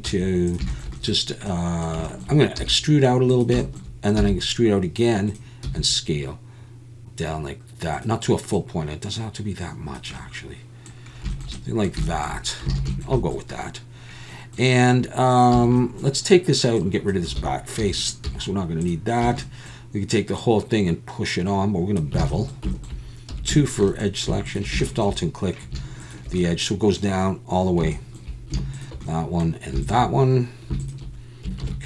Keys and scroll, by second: 0.1 s, 2.6 e, 4.2 e, 6.6 s, 12.7 alt+a, 15.5 a, 17.4 alt+a, 17.8 3, 18.2 x, 19.2 a, 22.2 alt+a, 23.3 2, 31.6 ctrl+b.